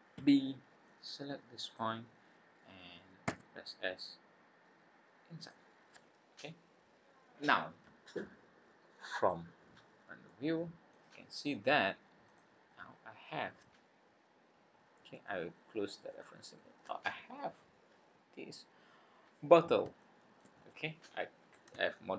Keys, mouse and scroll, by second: 0.2 b, 3.7 s, 5.8 scroll down 2, 9.2 click, 9.6-10.1 scroll down 6, 10.2 middle click, 12.2 click, 12.6-13.0 scroll up 5, 13.5-13.8 scroll down 3, 14.0 scroll up 1, 16.1 click, 16.7 scroll up 1, 18.3-19.1 scroll up 5, 20.0 shift+middle click, 20.6 scroll down 3, 21.9 shift+middle click.